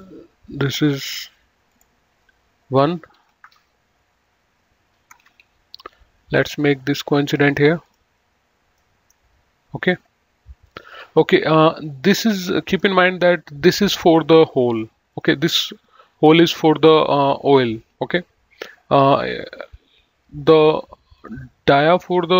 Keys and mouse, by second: 1.3 click, 3.5 KP_1, 3.7 Return, 5.3 Escape, 6.6 click, 8.2 click, 8.9 middle click, 10.9 click, 12.5 middle click, 13.0 click, 14.9 click, 21.5 click.